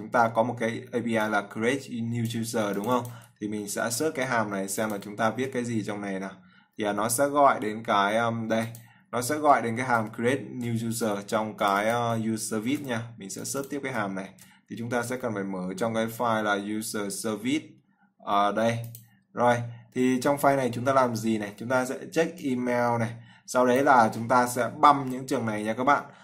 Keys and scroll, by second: 4.1 ctrl+c, 5.6 ctrl+v, 13.0 ctrl+c, 14.6 ctrl+v.